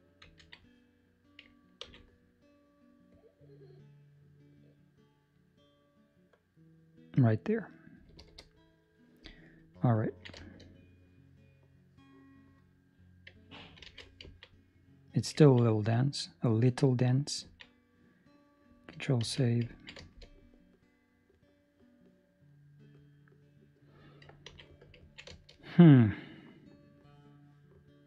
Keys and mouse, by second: 0.2 ctrl+z, 1.7 ctrl+r, 9.2 middle click, 10.0 ctrl+middle click, 10.3 shift+middle click, 10.8 middle click, 14.1 alt+a, 14.2 ctrl+middle click, 14.5 middle click, 15.4 ctrl+middle click, 15.6 middle click, 17.5 middle click, 17.7 middle click, 17.8 ctrl+middle click, 19.2 ctrl+s, 19.7 ctrl+middle click, 19.9 shift+middle click, 20.3 middle click, 24.5 ctrl+s, 25.1 ctrl+middle click, 25.3 shift+middle click, 25.5 middle click.